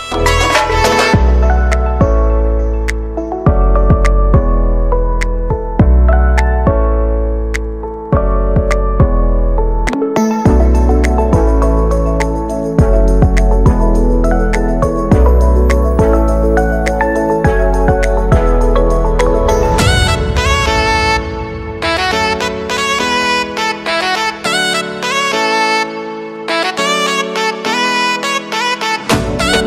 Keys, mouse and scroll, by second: 0.3 click, 1.1 Return, 2.8 click, 3.6 space, 5.3-6.7 drag, 7.7 Return, 9.2 click, 12.3 F9, 12.7-13.4 typing, 16.3-20.9 drag, 20.9 space, 22.5 click, 25.0-29.6 drag.